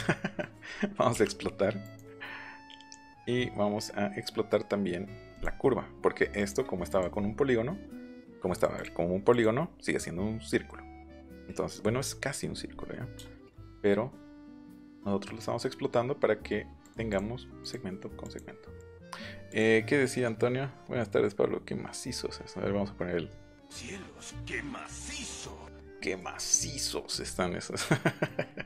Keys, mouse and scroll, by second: 0.2 scroll up 2, 0.3 scroll down 2, 0.6 scroll up 2, 0.7-1.0 scroll down 2, 1.8 right click, 5.3 right click, 6.3 click, 6.9 click, 7.1 middle click, 8.2 ctrl+z, 8.5 click, 8.7 click, 9.3 click, 13.1 shift+middle click, 13.2 shift+click, 14.5 right click, 16.8 right click, 17.1 right click, 17.6 click, 18.2 click, 18.7 click, 19.5 click, 26.0 middle click, 26.3 scroll down 1, 28.2 middle click, 28.5 scroll up 1.